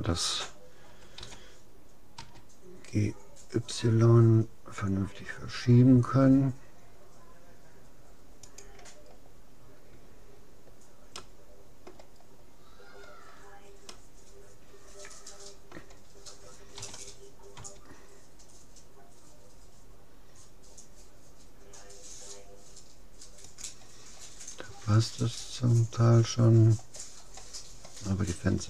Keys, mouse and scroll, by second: 1.2 g, 9.1-10.7 middle drag, 11.3-13.1 middle drag, 13.9-16.7 middle drag, 16.8 g, 24.9-26.3 middle drag, 28.3-28.6 scroll down 1.